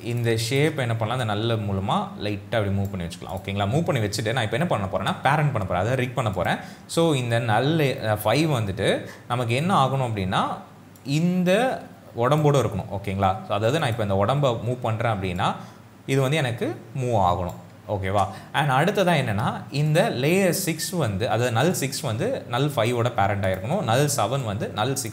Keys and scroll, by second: 18.1 ctrl+z.